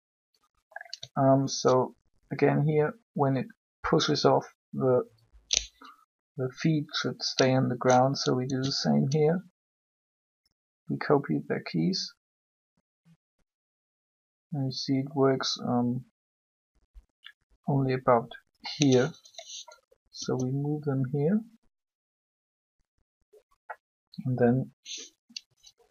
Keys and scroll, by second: 8.4 shift+d, 20.1 g.